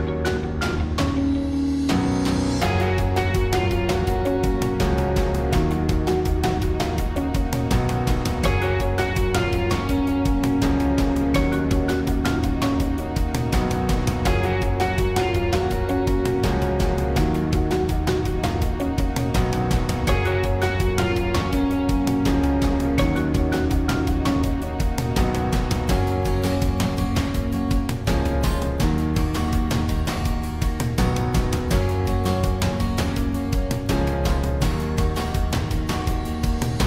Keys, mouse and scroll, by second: 0.1 r, 1.1 middle click, 1.4-4.1 typing, 6.6 drag, 6.8 r, 7.4 r, 7.4 g, 7.7 s, 8.7 g, 9.5-10.8 drag, 9.8 s, 10.8 g, 11.5 KP_1, 13.5 s, 14.6 g, 15.9 g, 15.9 KP_1, 17.4 s, 17.8-19.6 drag, 19.8-21.6 drag, 22.2 Tab, 23.0 Tab, 26.6 Tab, 28.4-32.6 middle drag, 33.9-36.8 middle drag.